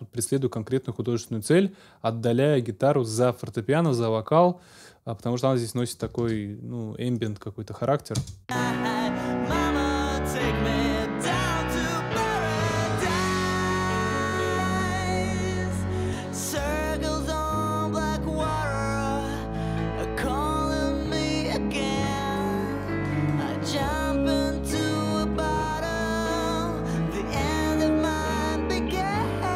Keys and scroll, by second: 6.2 super+s, 8.1 space.